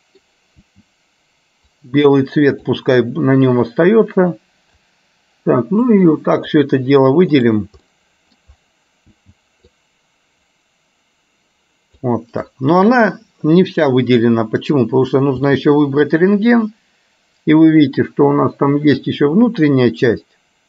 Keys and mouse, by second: 8.0 middle click.